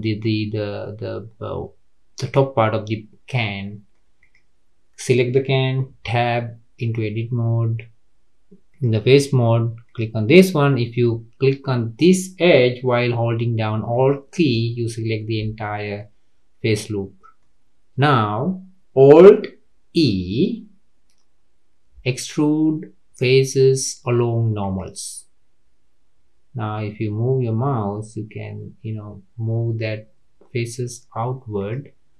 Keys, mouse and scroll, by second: 3.4-4.2 middle drag, 4.2 click, 5.9 Tab, 6.5-6.8 scroll up 4, 8.7 click, 9.8 click, 13.9 alt+click, 14.6 middle click, 15.5-15.9 scroll down 3, 15.9-19.9 middle drag, 19.9 alt+e.